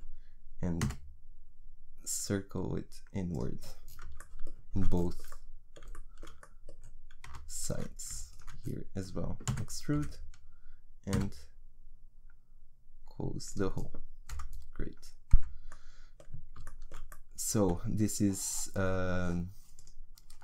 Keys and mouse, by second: 0.8 s, 7.6-9.5 right drag, 9.5 e, 11.1 s, 14.3 click, 15.4 Tab.